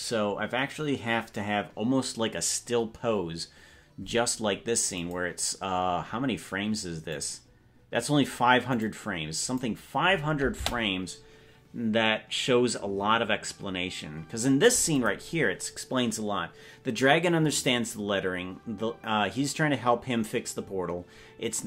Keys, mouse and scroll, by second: 5.1 click, 7.2 click, 8.8 click, 9.5 click, 10.6 space, 15.1 click.